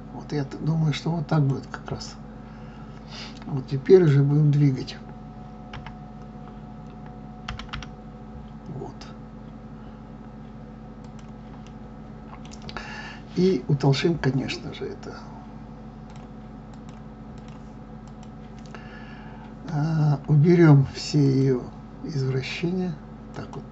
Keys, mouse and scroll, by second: 2.0-5.6 middle drag, 5.6 KP_1, 7.5 g, 11.6-16.1 middle drag, 16.1-23.7 drag.